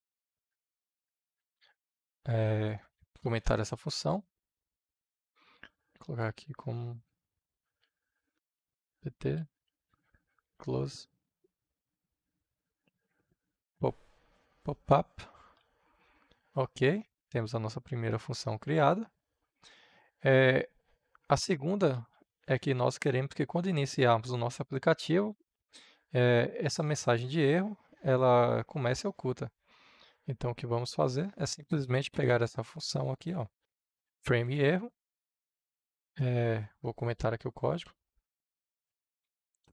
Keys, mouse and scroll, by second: 3.3 Return, 5.9 shift+3, 6.3 space, 7.6-11.4 typing, 12.0 Return, 12.8-15.5 typing, 16.8-22.0 drag, 22.0 Return, 31.4-33.7 drag, 34.2 ctrl+c, 35.0-36.8 drag, 37.1 shift+3, 37.8 space.